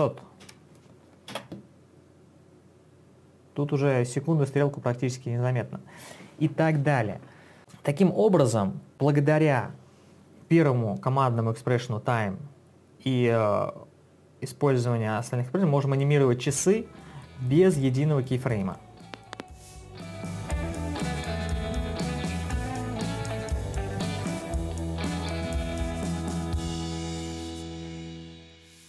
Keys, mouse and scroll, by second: 0.0-1.5 typing.